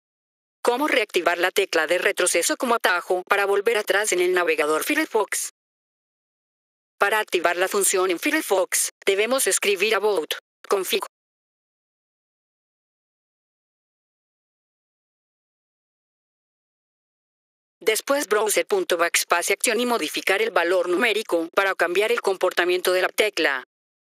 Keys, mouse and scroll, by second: 0.1 click, 6.0 F4, 6.5 click, 9.0 click, 10.2 ctrl+v, 17.2 F4, 17.7 click, 23.9 F4.